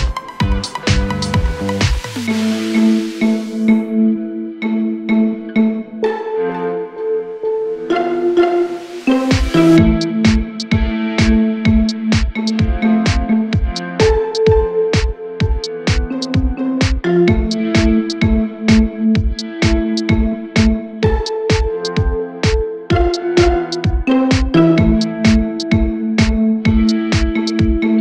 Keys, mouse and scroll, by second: 0.0 typing, 0.2 double click, 0.3 right click, 1.2 double click, 1.8-2.6 typing, 4.4-6.1 typing, 5.0 Return, 6.8 Escape, 7.0 scroll down 3, 7.3-8.0 typing, 7.7 double click, 8.1 scroll up 5, 8.4 ctrl+click, 9.2 ctrl+click, 9.4 scroll down 5, 9.5 space, 9.7 middle click, 9.9 scroll up 4, 10.1 double click, 10.2 double click, 10.6-14.8 typing, 11.4 Return, 13.7 Escape, 14.3 double click, 14.4 double click, 16.0-16.8 typing, 17.4 ctrl+click, 17.6 right click, 20.9 m, 23.4-24.1 scroll down 6, 23.5 middle click, 24.1 scroll up 5, 24.4-25.0 scroll down 14, 25.3-26.3 scroll up 2, 26.5-27.0 scroll up 18, 27.0 scroll down 9, 27.3-27.6 scroll up 14.